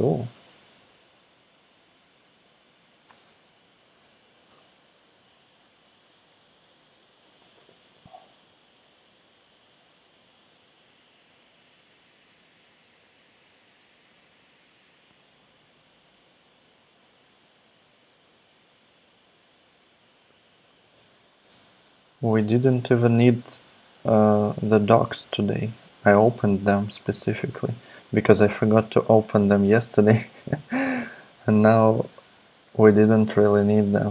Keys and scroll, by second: 21.5 super+Tab, 22.7 super+Tab, 26.9 super+Tab, 28.3 super+Tab.